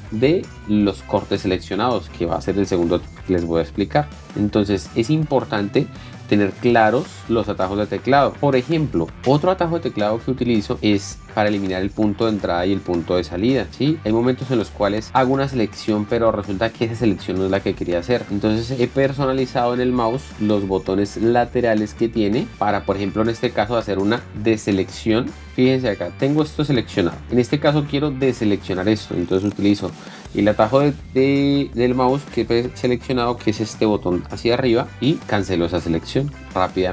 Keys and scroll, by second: 3.9-5.7 typing, 11.5-13.4 typing, 15.2-16.4 typing, 24.7 ctrl+x, 25.4 o, 26.5 j, 27.1 k, 35.9 alt+x, 36.3 j.